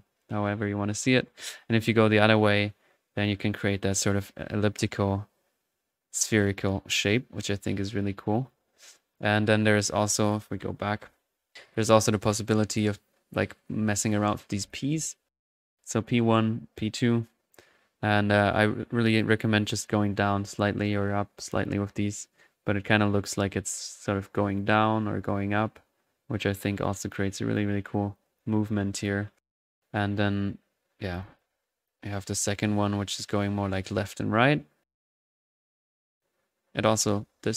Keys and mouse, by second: 10.2 click, 10.8 typing, 12.8-14.8 drag, 12.8 typing, 15.0 ctrl+z, 15.5-32.2 ctrl+drag, 31.9 ctrl+z.